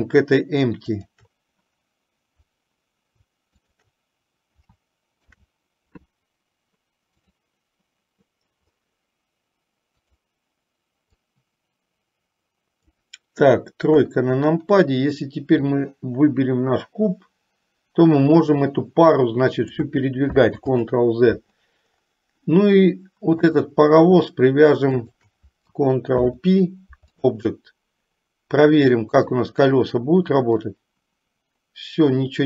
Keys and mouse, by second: 1.0 shift+click, 3.7 shift+click, 5.3 ctrl+p, 11.3-13.2 drag, 14.1 KP_3, 15.8 click, 17.1-20.1 drag, 20.8 ctrl+z, 23.5 click, 25.0 shift+click, 26.2 ctrl+p, 29.4 click, 31.0-32.4 drag.